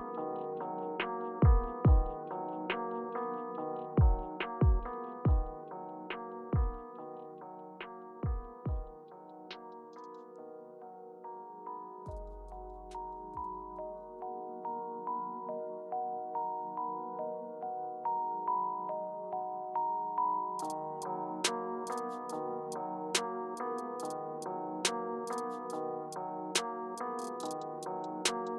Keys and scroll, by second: 3.0 Return, 4.3 scroll down 1, 4.5 Page_Down, 6.5 scroll down 3, 6.8 Page_Down, 15.7 Page_Up, 16.3 Page_Down, 17.3-18.9 typing, 20.5-21.3 typing, 24.6-25.8 typing, 27.4 typing, 27.8 Return.